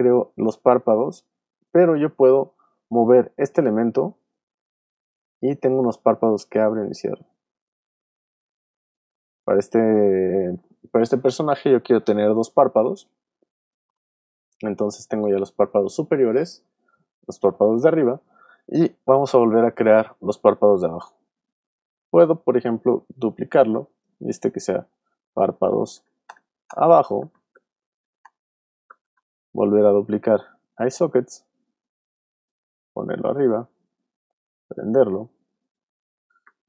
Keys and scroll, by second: 2.0 shift+super+z, 2.8 super+z, 9.2 shift+super+z, 10.1 super+z, 22.8 super+d, 24.5 Return, 24.7 Right, 25.3 BackSpace, 26.8-28.9 typing, 29.0 Return, 31.0 super+d.